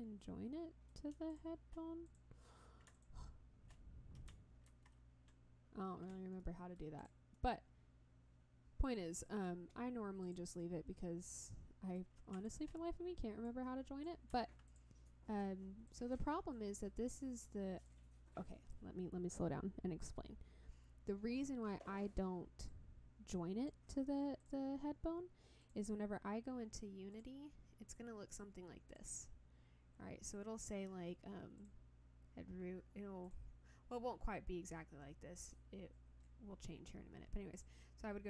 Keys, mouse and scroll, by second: 0.1 scroll up 1, 0.2 middle click, 1.3 shift+click, 2.1 click, 2.9 shift+click, 4.7 ctrl+j, 6.4 middle click, 7.0 click, 7.3-9.4 middle drag, 10.2 click, 10.6-11.9 middle drag, 12.4 shift+click, 13.4 click, 14.7 click, 15.9-18.0 drag, 22.7 click, 24.4 click, 25.6 click, 27.1 click, 28.9 click, 31.6 click, 33.2 click, 37.5 click.